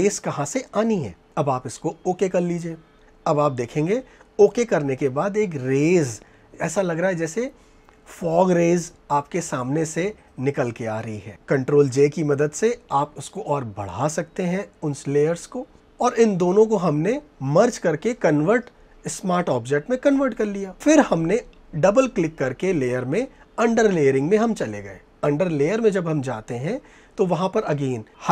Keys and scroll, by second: 8.6 ctrl+j, 15.7 ctrl+j.